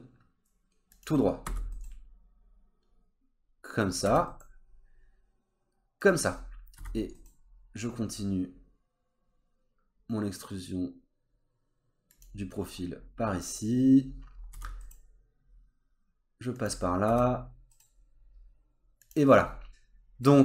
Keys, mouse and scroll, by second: 1.5 e, 6.3-6.8 scroll down 2, 6.8 e, 12.7-13.0 scroll up 2, 13.0-13.4 scroll down 2, 13.4 scroll up 1, 13.6 scroll down 1, 14.0-14.5 scroll up 3, 14.5 e, 16.8 scroll down 2, 17.1 e, 19.3-19.6 scroll up 2, 19.6 middle click.